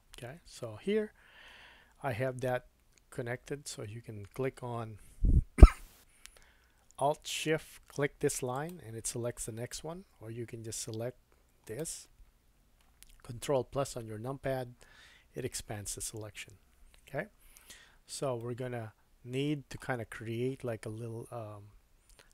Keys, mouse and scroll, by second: 1.5-4.9 scroll up 2, 8.5 alt+shift+click, 11.6 click, 13.9 ctrl+KP_Add, 13.9-22.3 ctrl+drag, 18.4 middle click.